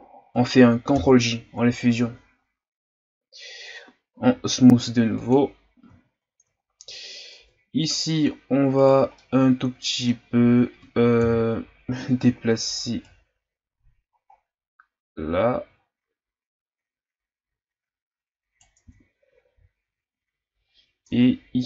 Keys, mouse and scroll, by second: 1.0 ctrl+j, 4.1 w, 6.0-6.6 scroll down 2, 6.6-7.3 ctrl+scroll up 5, 7.3 Tab, 8.8 right click, 9.2-11.2 middle drag, 11.2 KP_1, 13.0 right click, 18.8 Tab, 19.5 a, 19.9-20.4 scroll down 2, 20.4-21.0 ctrl+scroll up 3, 21.0 Tab.